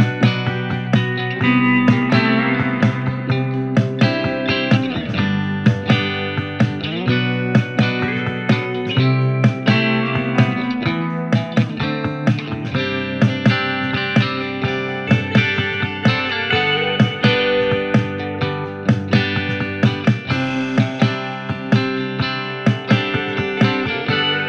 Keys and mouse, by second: 14.9 f, 15.4 middle click, 15.7-24.4 drag.